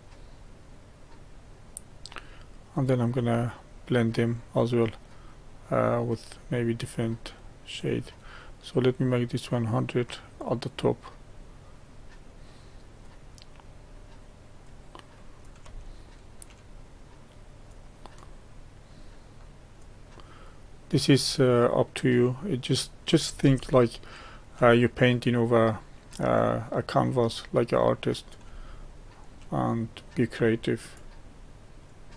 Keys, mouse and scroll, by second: 3.7-15.8 drag, 15.8 shift+middle click, 16.7-23.7 drag, 23.7-25.1 shift+middle drag, 25.1-28.6 drag, 28.6-30.1 shift+middle drag, 30.1-32.1 drag.